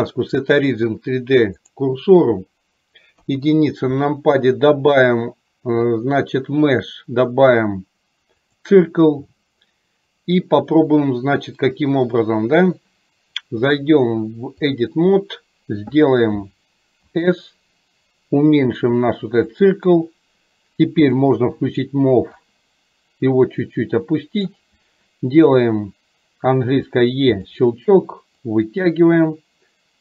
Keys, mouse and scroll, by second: 5.0-8.6 drag, 13.6-14.8 drag, 22.5-24.5 drag, 28.5-30.0 drag.